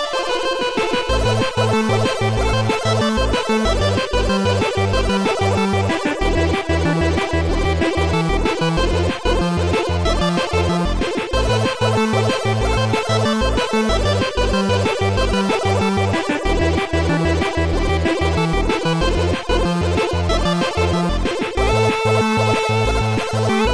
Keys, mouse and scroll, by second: 0.2 shift+click, 2.9 shift+click, 5.3 shift+click, 8.8 shift+click, 9.2 shift+click, 11.7 click, 12.9 ctrl+z, 13.7 ctrl+z, 13.7 click, 15.1 click, 20.2 click, 21.9 click, 23.2 click.